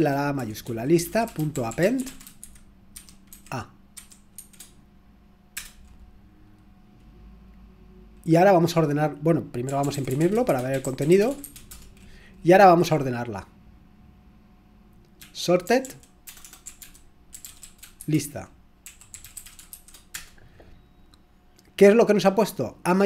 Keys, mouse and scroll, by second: 0.0-4.4 typing, 5.5 typing, 9.4-11.9 typing, 15.3-20.2 typing.